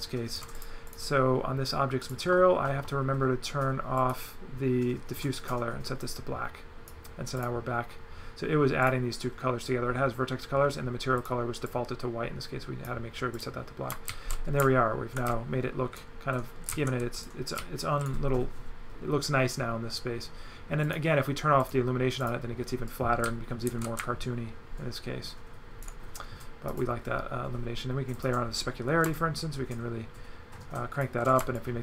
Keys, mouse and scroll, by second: 0.6 click, 2.1 click, 4.1 click, 5.4 click, 6.2 click, 7.4 click, 8.9 click, 11.2 click, 11.7 click, 13.4 click, 13.9 shift+right click, 16.7 right click, 17.6 right click, 20.8 click, 21.7 click, 22.2 click, 22.9 right click, 26.7 click, 28.1 click, 29.2 shift+click, 31.6 shift+click.